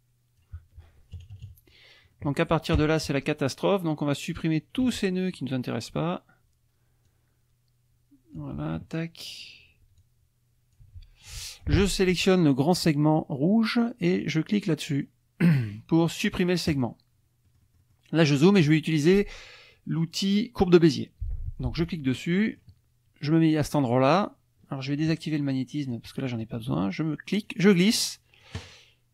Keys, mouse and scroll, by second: 1.1 KP_Subtract, 2.1 middle click, 3.4-5.0 drag, 4.8 Delete, 5.3 middle click, 7.0-8.5 drag, 8.4 Delete, 10.0-11.0 drag, 10.8 Delete, 11.3 click, 12.8 click, 16.7 click, 17.5 click, 21.9 click, 22.2 click, 25.9 click, 27.4-28.6 drag.